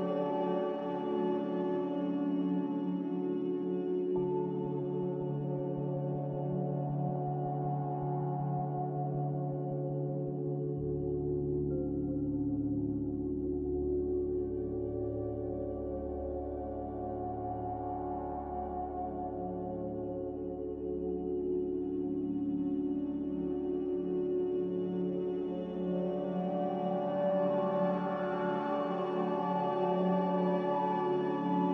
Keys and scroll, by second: 1.4 h.